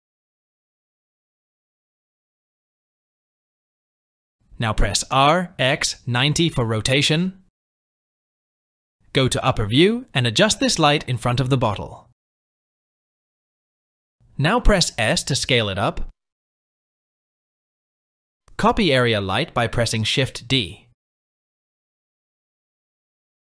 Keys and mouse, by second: 4.4 r, 9.4 KP_7, 11.2 g, 16.0 s, 18.8 shift+d, 21.5 r, 22.4 r, 23.2 shift+d.